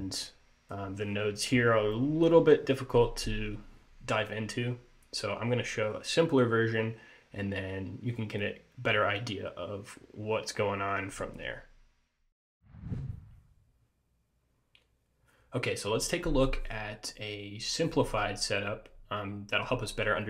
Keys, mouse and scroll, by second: 0.6 click.